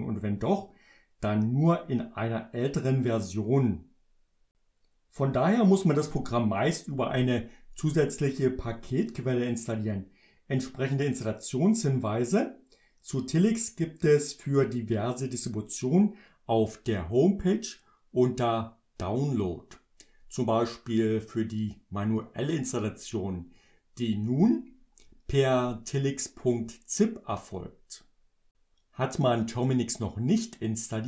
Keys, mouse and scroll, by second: 9.5 click, 21.1 click.